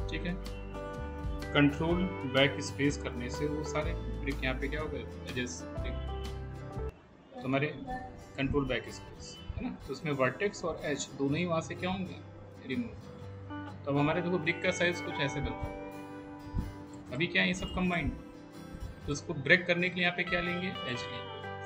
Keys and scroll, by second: 2.8 ctrl+BackSpace.